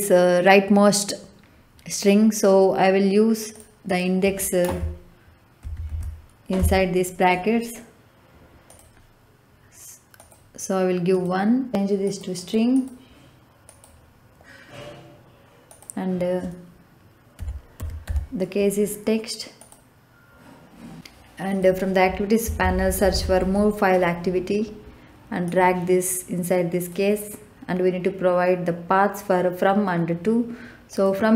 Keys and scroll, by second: 5.6 shift+9, 5.9 shift+0, 6.5 Left, 17.1-18.5 typing, 22.4-23.8 typing.